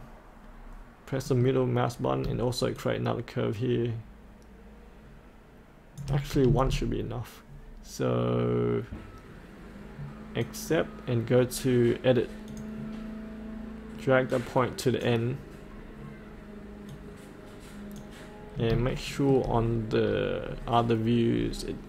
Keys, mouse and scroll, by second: 1.3 middle click, 2.8-6.0 shift+drag, 10.4 click, 14.4-18.4 drag, 18.5 scroll up 1, 18.9 shift+middle click, 19.7 scroll down 1, 21.3-21.8 scroll up 1.